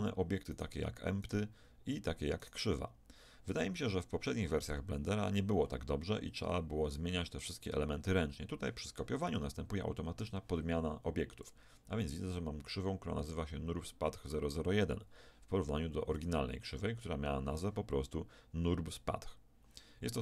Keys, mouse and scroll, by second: 0.5-5.2 right drag, 10.2-12.5 right drag, 11.4-14.2 drag, 16.2-20.2 right drag.